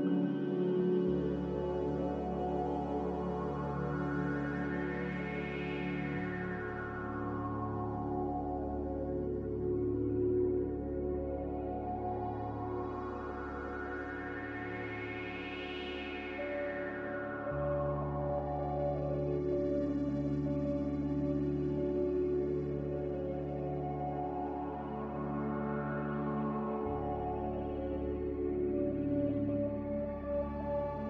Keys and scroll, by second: 2.9 Delete, 12.5 z.